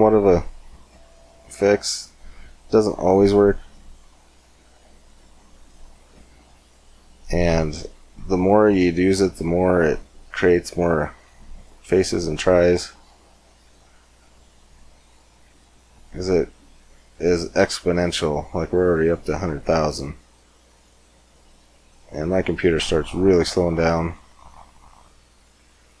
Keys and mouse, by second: 3.7-6.8 drag, 6.8-8.6 middle drag, 13.6-18.0 drag, 19.3-21.8 drag, 24.7-26.0 drag.